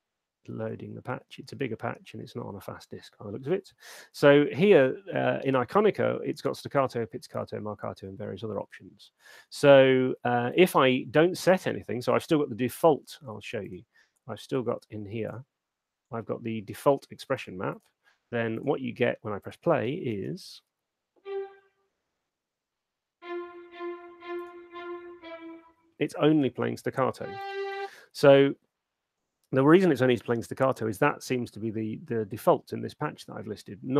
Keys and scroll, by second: 10.9 super+2, 20.3 alt+shift+space, 26.5 space.